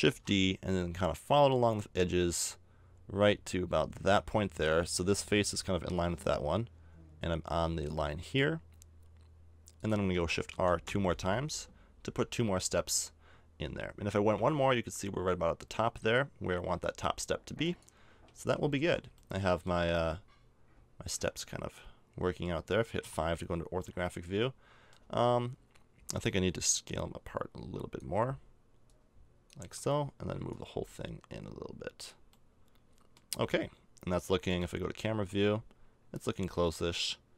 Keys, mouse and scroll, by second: 0.0 shift+d, 10.5 shift+r, 10.8 shift+r, 14.0 shift+r, 16.8 x, 18.1 a, 18.4 Tab, 18.8 z, 19.6 z, 23.0 KP_5, 23.7 middle click, 24.1 middle click, 25.0 Tab, 29.6 Tab, 32.3 middle click, 34.4 KP_0, 35.1 z.